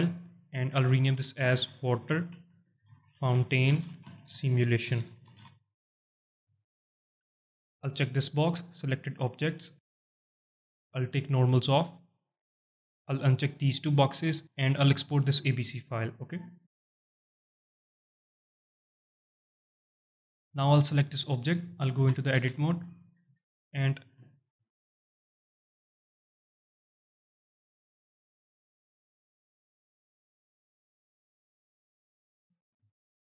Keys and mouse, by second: 20.1 z, 21.6 alt+drag, 22.1 Tab, 22.5 alt+shift+click, 23.3 Tab, 24.2 alt+shift+middle click, 24.6 alt+click, 25.5 click, 25.7 click, 26.1 alt+click, 27.8 alt+shift+click, 28.8 shift+click, 29.0 shift+click, 29.9 shift+click, 30.0 alt+shift+middle click, 30.3 alt+middle click, 32.3 alt+shift+middle click, 32.8 alt+middle click.